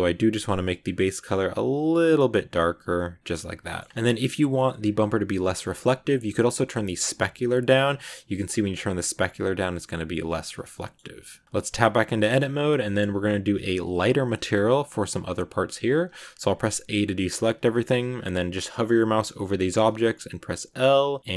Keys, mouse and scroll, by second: 0.7 click, 3.5-5.5 shift+middle drag, 5.5 scroll down 2, 6.5-8.9 drag, 9.3-10.5 drag, 10.5 scroll down 3, 10.6 middle click, 11.4 scroll up 1, 11.5 Tab, 12.7 shift+middle click, 12.9 scroll up 1.